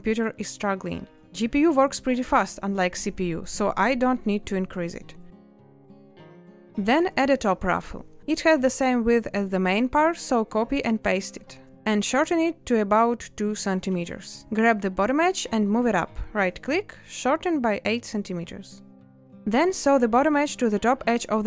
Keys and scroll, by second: 5.0 space, 12.7 z, 16.1 8, 16.7 Return, 17.8 a, 19.7 n.